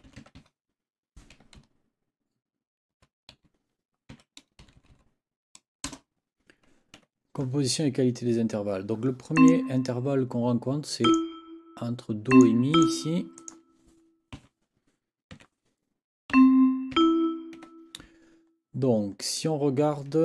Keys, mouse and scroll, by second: 0.0-0.9 typing, 1.6 Left, 3.4 Right, 4.1 a, 4.6 Left, 5.8 Return, 7.0 Escape, 9.4 click, 11.0 click, 12.3 click, 12.7 click, 13.4 click, 14.3 n, 15.3 6, 16.3 c, 17.0 e, 18.0 Escape, 19.3 click.